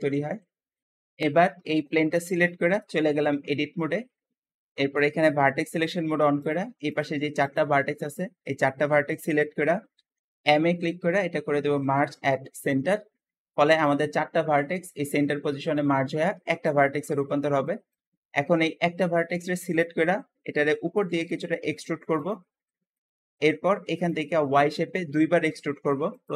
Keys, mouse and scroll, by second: 0.0 Escape, 0.2-0.6 scroll down 3, 0.6 shift+middle click, 2.5 Tab, 3.0-3.5 scroll up 2, 6.3 shift+click, 6.7 shift+click, 7.3 shift+click, 7.9 shift+click, 9.8 m, 13.5 `, 16.4 Escape, 17.0-20.6 shift+middle drag, 20.6 e, 20.9 z, 22.5 shift+middle click, 23.0-23.5 scroll up 1, 25.3 Escape, 26.0 click, 26.2 e.